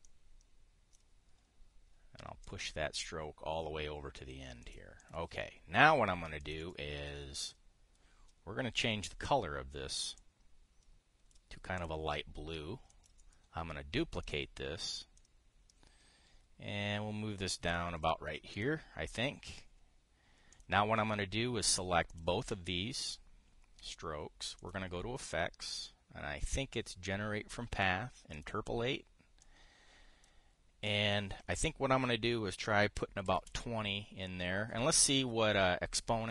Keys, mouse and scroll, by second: 0.0 click, 0.7-1.7 drag, 3.1 click, 5.3 click, 5.7 click, 7.1 click, 8.1 click, 10.9-12.1 drag, 12.5 click, 13.6 click, 14.9 click, 15.9-18.8 ctrl+drag, 30.1 click, 31.6 click, 33.9 KP_2, 34.1 KP_0.